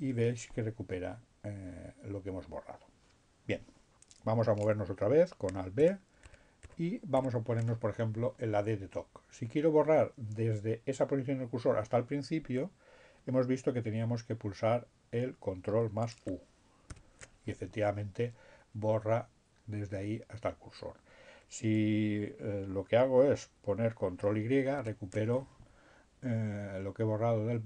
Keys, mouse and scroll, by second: 5.2 alt+b, 14.4 ctrl+u, 22.9 ctrl+y.